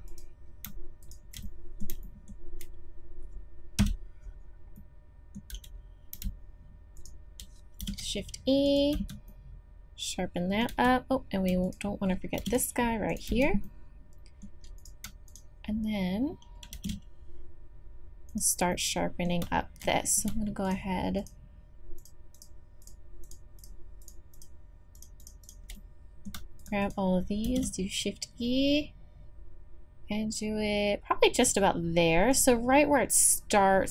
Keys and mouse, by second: 1.3 click, 1.5 click, 2.0 click, 3.8 KP_Decimal, 4.4 middle click, 4.8 middle click, 5.5 z, 7.8 shift+e, 8.9 z, 10.7 z, 12.4 shift+e, 13.3 z, 16.7 shift+e, 18.4 middle click, 25.8-30.6 drag, 27.4 shift+e.